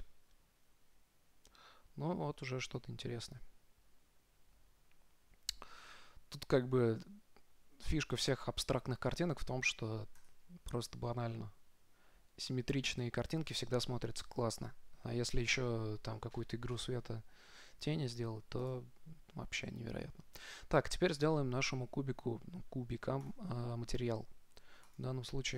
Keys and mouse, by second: 0.0 click, 5.3-7.3 middle drag, 10.5-12.4 right drag, 18.9-20.9 drag, 23.5-25.3 drag.